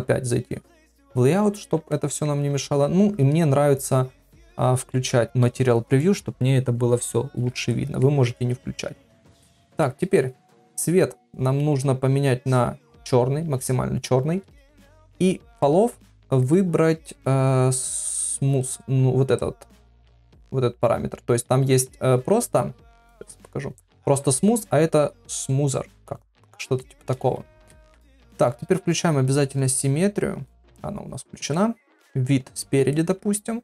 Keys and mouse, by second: 1.9 ctrl+middle click, 4.9 ctrl+Tab, 7.7 middle click, 9.5 ctrl+middle click, 9.9 middle click, 15.7-21.6 drag, 22.3-27.2 drag, 27.7 ctrl+middle click, 31.5 KP_1, 33.0 middle click, 33.4-33.6 middle drag.